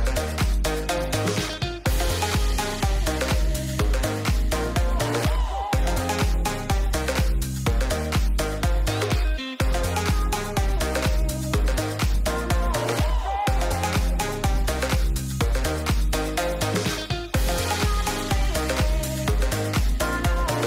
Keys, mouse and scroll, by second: 1.9 shift+middle click, 2.1-2.5 middle drag, 3.8 middle drag, 4.1 shift+middle click, 5.0 middle click, 5.2 shift+middle click, 5.7 shift+middle click, 6.3 Tab, 8.1 alt+click, 9.0 middle click, 11.1 alt+click, 12.6-14.3 drag, 15.4-20.6 drag.